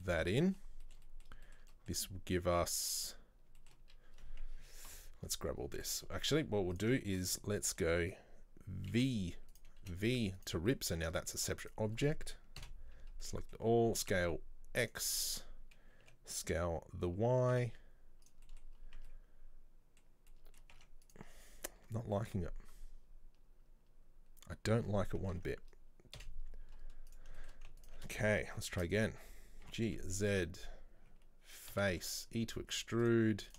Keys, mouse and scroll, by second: 0.1 shift+middle click, 0.7 scroll up 1, 0.9-2.3 middle drag, 2.3-2.6 scroll down 1, 2.6-4.9 middle drag, 4.9 ctrl+l, 5.5-5.8 scroll up 4, 5.8-6.8 middle drag, 6.8 click, 7.1 shift+middle click, 7.7 alt+right click, 9.0 c, 10.7 v, 10.7 middle click, 11.0-11.3 scroll down 1, 11.3 shift+middle click, 11.7 right click, 12.7 ctrl+l, 13.2 scroll up 1, 13.3 middle click, 13.7 scroll down 1, 14.0 s, 15.2 middle click, 16.1 s, 18.5 middle click, 18.7 scroll down 1, 18.8 scroll up 1, 19.0 Tab, 19.1-20.1 middle drag, 20.1 scroll down 1, 20.4-20.8 middle drag, 20.8 Tab, 21.1 right click, 26.2 Delete, 27.4 shift+middle click, 27.9 alt+right click, 28.8 shift+d, 29.7 g, 33.5 right click.